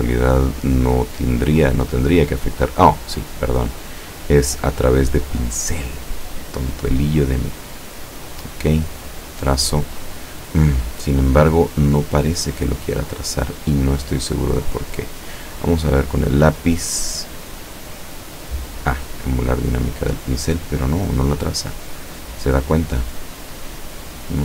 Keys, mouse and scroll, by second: 1.9 click, 6.4 click, 8.0 click, 9.0 click, 12.4 click, 13.0 click, 14.3 click, 15.7 click, 18.2 click, 19.1 click, 21.3 click.